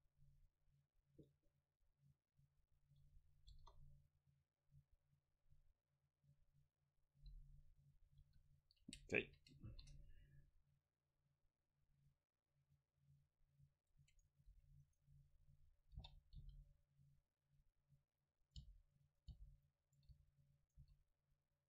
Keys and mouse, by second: 2.2 middle click, 3.0 middle click, 3.7 KP_0, 8.3 KP_7, 9.3 a, 9.7 ctrl+r, 14.3-16.1 drag, 14.6 a, 14.9-16.8 right drag, 16.1 o, 16.4 g, 18.5-19.6 right drag, 18.7 g, 19.0 click, 19.4 g, 20.2 r, 20.7 right click, 20.9 r.